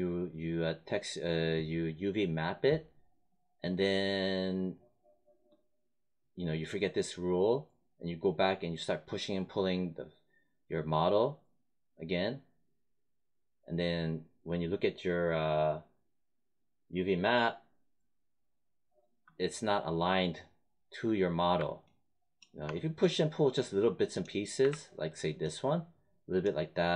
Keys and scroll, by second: 24.5 w.